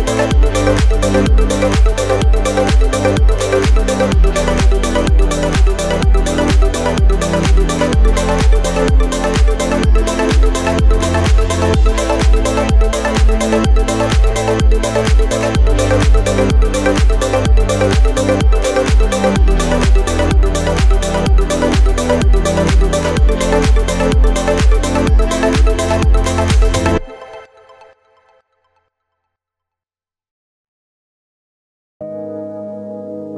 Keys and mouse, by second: 4.5 click, 5.1 Tab, 5.7 z, 6.6-15.8 drag, 7.1 z, 15.0 s, 16.3 KP_7, 17.4 s, 20.9 shift+d, 21.1-22.4 middle drag, 21.7 s, 22.4-23.7 drag, 23.7-30.9 middle drag, 23.7 s, 25.0 KP_1, 25.4 KP_3, 25.4 z, 26.7 r, 27.0 g, 28.3 z, 30.2 z, 30.9 click, 31.1-33.2 middle drag, 31.1 z, 32.5 s, 33.2-33.3 drag.